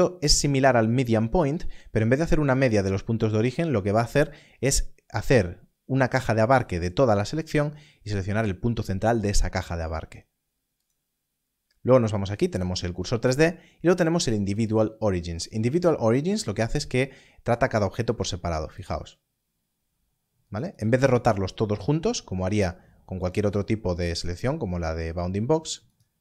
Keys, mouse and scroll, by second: 10.7 click, 14.6 click, 18.7 click, 20.4 right click, 23.2 click, 25.8 right click.